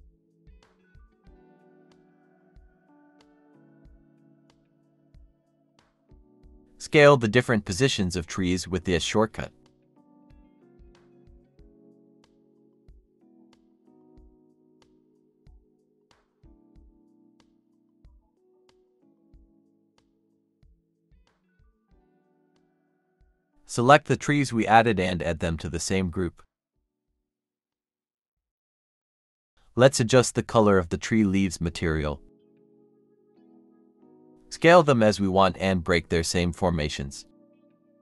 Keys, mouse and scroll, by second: 0.0-0.4 typing, 1.2 Escape, 1.7-2.6 typing, 3.8 typing, 5.6-8.1 typing, 6.3 Escape, 9.1 scroll down 1, 9.3-11.4 typing, 14.0-14.4 scroll up 1, 14.4 typing, 15.2 Escape, 15.9-18.0 typing, 16.2 middle click, 18.1 Escape, 18.2 Escape, 18.4 scroll up 1, 18.7 middle click, 19.9 typing, 21.0 middle click, 21.1 scroll up 1, 21.4-22.5 typing, 23.1 shift+click, 23.3 scroll down 1, 23.6 shift+click, 24.1 scroll down 1, 24.3 shift+click, 24.3 m, 28.5-29.1 scroll up 1, 31.3 scroll down 1, 31.6 shift+click, 32.2 scroll up 1, 32.4-34.0 typing, 33.1 Escape, 35.2 scroll down 1, 35.3-37.2 typing, 36.7 middle click, 37.8 middle click.